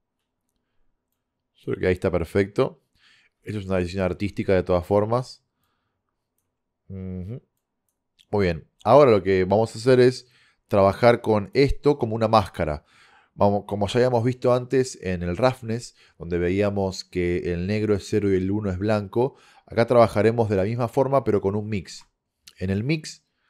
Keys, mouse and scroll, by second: 9.0-10.1 middle drag, 9.0 scroll down 1, 10.9-12.5 drag, 20.0-22.0 drag, 22.0 shift+a.